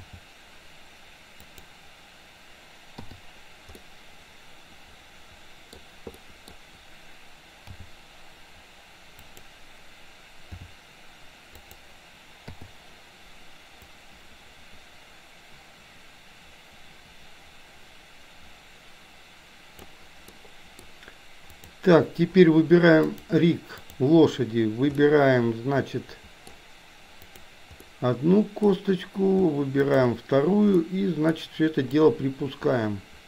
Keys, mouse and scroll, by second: 0.0 g, 3.2 i, 3.8-5.9 middle drag, 6.3 middle click, 7.9 g, 10.5 r, 12.5 i, 13.9-20.0 drag, 20.3-21.0 middle drag, 21.5 click, 23.3 click, 25.2-26.7 middle drag, 27.3 click, 27.9 middle click, 29.9 shift+click, 30.8 middle click, 31.9-33.2 drag.